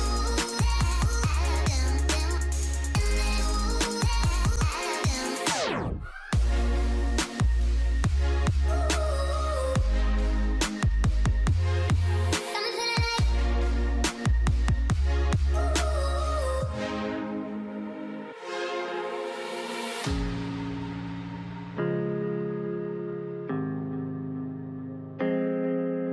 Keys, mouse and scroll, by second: 4.4 double click, 8.8-12.0 drag, 8.8 [, 21.6 alt+scroll up 1, 23.8 alt+scroll up 1, 23.8 double click, 25.4-26.1 typing.